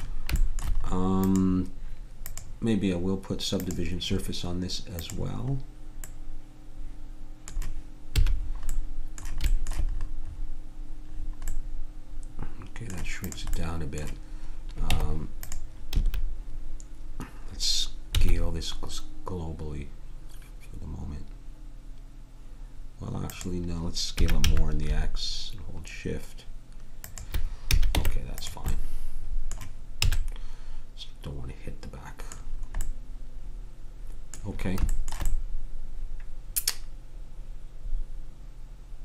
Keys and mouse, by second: 1.2-3.6 drag, 6.3 click, 8.2 a, 8.7-10.4 middle drag, 13.2-14.9 drag, 14.9 Tab, 15.9 a, 18.1 s, 24.2 s, 27.7 a, 27.9 Tab, 30.0 a.